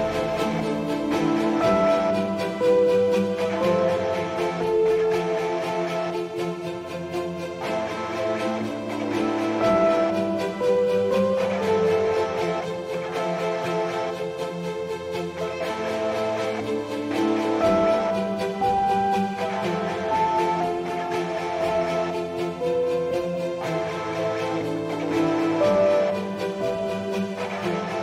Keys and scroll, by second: 14.6 F9.